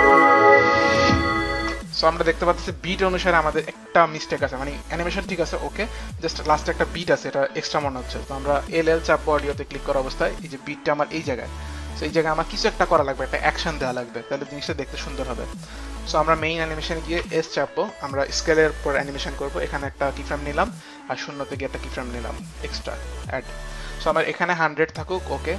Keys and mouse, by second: 1.6 space, 3.5 space, 8.1 click, 9.3 click, 9.3 l, 11.1 click, 13.5 l, 15.4 click, 15.8 click, 17.3 click, 17.3 s, 20.2 click, 21.3 click, 22.9 click.